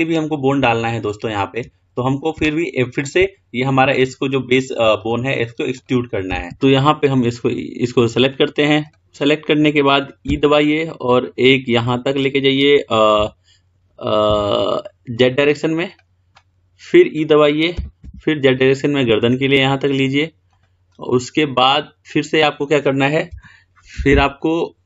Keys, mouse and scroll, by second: 4.0 click, 5.1 click, 6.0 click, 6.7 click, 9.0 click, 10.5 e, 21.1-23.4 middle drag, 23.4 KP_1.